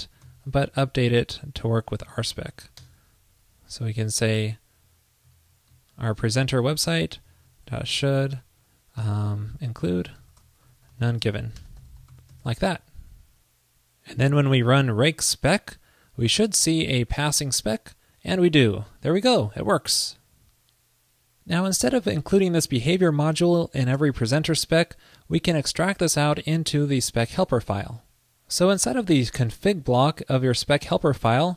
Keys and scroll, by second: 1.4 alt+Right, 2.3 alt+shift+Left, 4.0 alt+Right, 4.1 alt+Right, 5.4 alt+shift+Left, 6.7 super+x, 6.7 super+Right, 12.4 super+s, 26.5 super+x, 26.9 super+s.